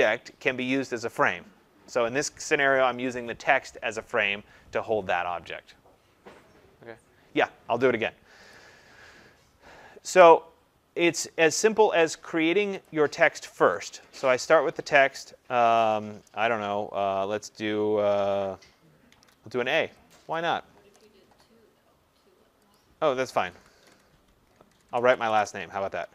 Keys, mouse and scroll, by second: 8.5 click, 11.1 click, 12.8 click, 14.4 click, 19.0 a, 20.2 click, 22.7 click, 23.3-26.1 typing.